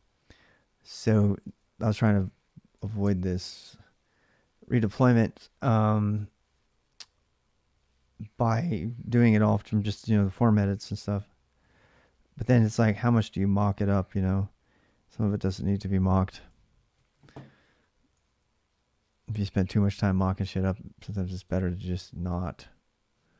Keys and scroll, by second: 1.0 typing, 2.3-3.1 typing, 3.2 Return, 17.9 alt+Tab.